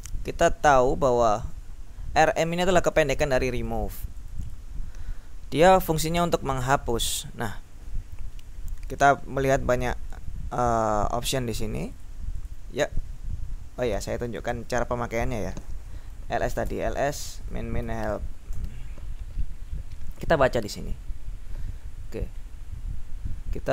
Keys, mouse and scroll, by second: 2.7 click, 3.9-5.1 drag, 5.8 click, 8.5-9.1 scroll down 2, 10.2-10.7 scroll down 2, 11.4-12.6 drag, 12.8-14.3 scroll down 2, 14.6 ctrl+l, 16.3-18.8 typing, 19.7-23.5 scroll up 4.